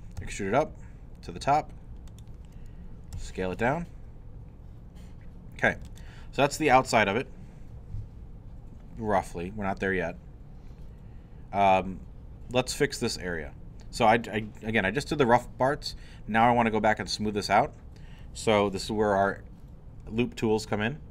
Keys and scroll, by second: 0.2 e, 3.1 s.